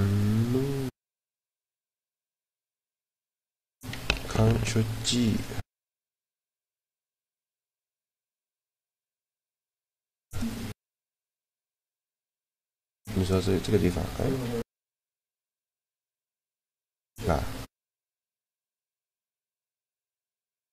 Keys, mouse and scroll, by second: 1.5 middle click, 2.2-4.4 right drag, 5.1-7.2 drag, 12.9-14.7 drag, 15.0-18.4 drag.